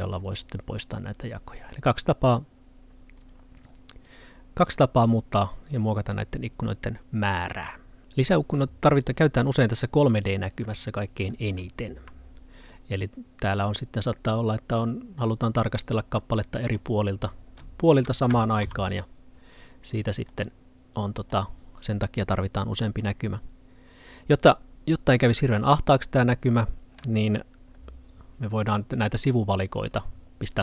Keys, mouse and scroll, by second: 1.7 right click, 4.1 click, 12.7 click, 15.8 middle click, 17.0 scroll up 1, 17.7 middle click.